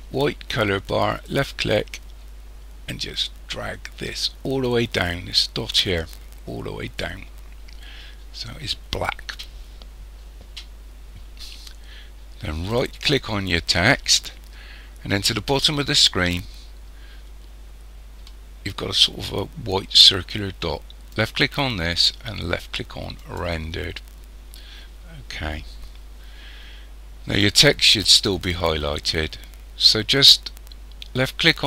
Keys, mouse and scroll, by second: 1.1 click, 12.7 right click, 21.1 click, 23.4 click.